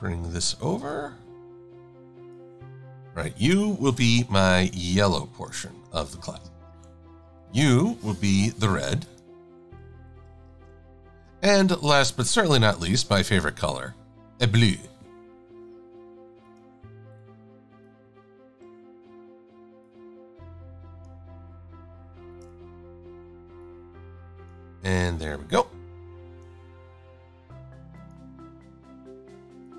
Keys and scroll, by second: 6.6 shift+super+a, 7.3 v, 8.4 i, 10.0 shift+x, 11.7 v, 23.1 Delete, 28.6 Delete.